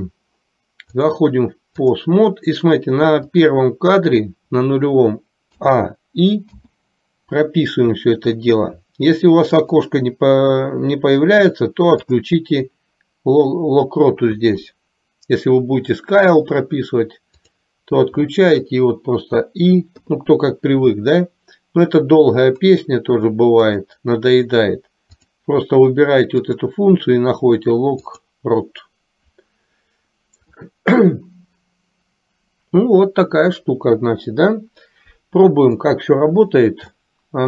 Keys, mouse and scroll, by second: 1.1-2.2 drag, 3.6 click, 5.7 a, 6.7 i, 9.7-10.7 drag, 12.2-18.2 drag, 23.8-24.8 drag, 25.2-26.6 drag, 28.3 click, 34.3 KP_3, 35.9-36.3 drag, 37.1-37.4 shift+middle drag.